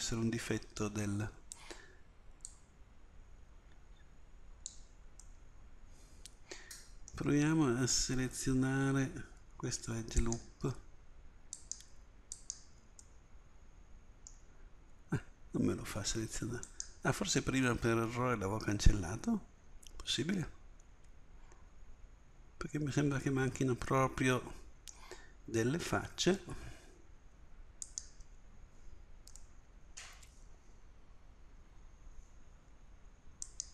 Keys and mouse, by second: 2.5-4.3 drag, 10.2-14.3 middle drag, 16.7-18.1 middle drag, 27.9-29.7 middle drag, 30.6 middle click, 32.0-33.7 middle drag.